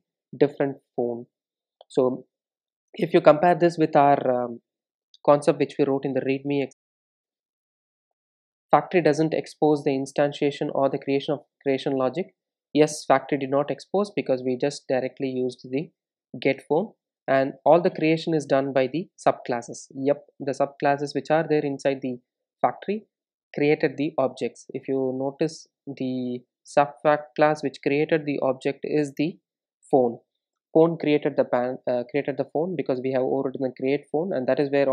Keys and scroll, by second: 1.5 super+b, 4.3 super+e, 17.2 super+e, 28.2 super+b.